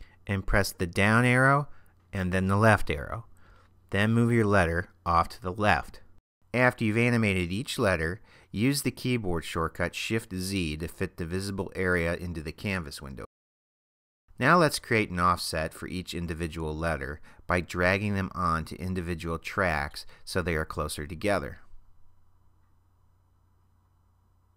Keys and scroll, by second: 2.2 Left, 9.4 shift+z.